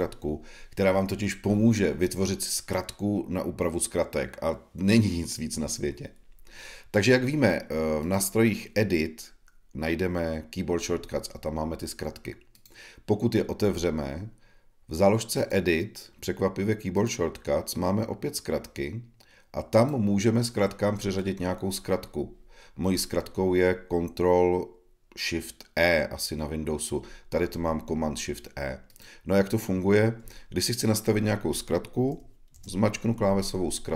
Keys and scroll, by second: 32.5 shift+super+e.